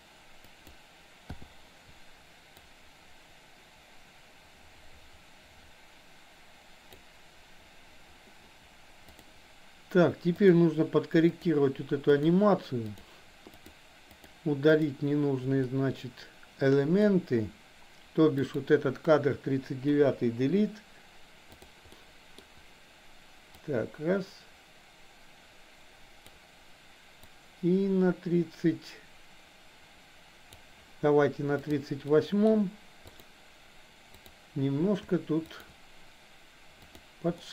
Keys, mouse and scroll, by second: 1.4 i, 2.7-7.1 drag, 10.6 shift+click, 11.3 shift+click, 12.2 shift+drag, 13.6 shift+click, 14.1 shift+click, 14.8 shift+click, 15.7-17.1 middle drag, 18.4 click, 19.9 Delete, 21.9 middle click, 23.7 click, 27.3 click, 32.2 middle drag, 33.2 click, 34.2 click, 35.6 shift+drag, 36.9 click, 37.4-37.5 middle drag.